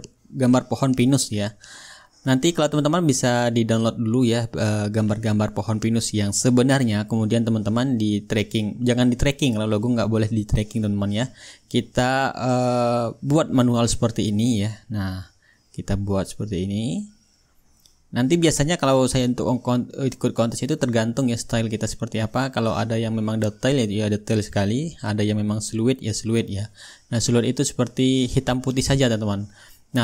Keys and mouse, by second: 3.1-5.1 middle drag, 5.7-21.2 drag, 22.3-23.4 drag, 23.6-24.8 right drag, 25.0-26.1 drag, 26.7-27.8 drag, 29.5-30.0 ctrl+shift+drag.